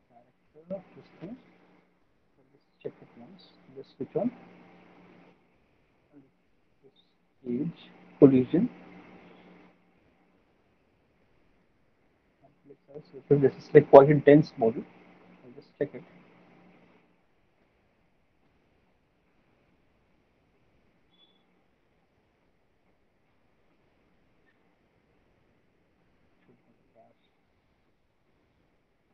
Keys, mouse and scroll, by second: 2.8 click, 6.7 click, 8.4 middle click, 9.9 middle click, 11.0 click, 12.3 click.